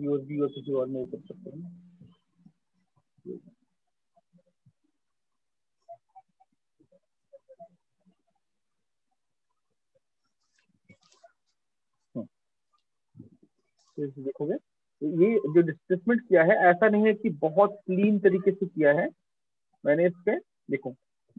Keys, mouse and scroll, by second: 2.6 click, 4.8 click, 7.2 click, 8.6 right click, 12.3-13.6 scroll, 13.7 ctrl+scroll, 16.1 click, 17.2-18.5 middle click, 17.7-18.5 scroll, 18.5 ctrl+middle click, 19.1 middle click, 19.7 middle click, 20.1 middle click, 20.4 middle click.